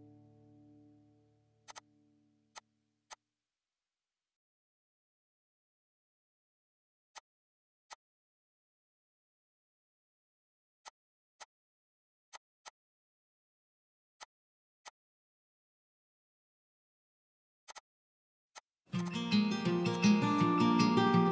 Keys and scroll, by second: 2.1 Escape, 3.0-5.7 typing, 8.5 Delete, 10.3 l, 12.0 e, 13.9 l, 15.1 Escape, 18.2 a, 19.6 p, 20.7 e.